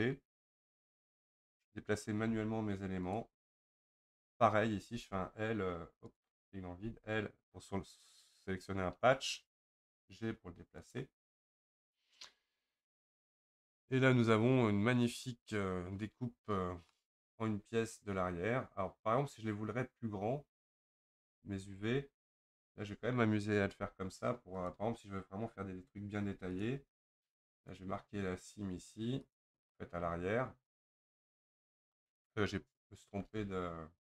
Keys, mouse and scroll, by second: 0.5 l, 2.2 g, 4.9 l, 6.2 click, 6.8 l, 9.6 g, 11.6 click, 16.9-20.0 middle drag, 22.0-22.5 scroll up 1, 22.7 click, 23.8 2, 24.7 click, 25.4-26.6 scroll up 4, 26.6 ctrl+click, 29.4-30.8 right drag, 30.8 click, 31.3-32.7 scroll down 2, 32.7-33.2 scroll down 1, 33.2 ctrl+z.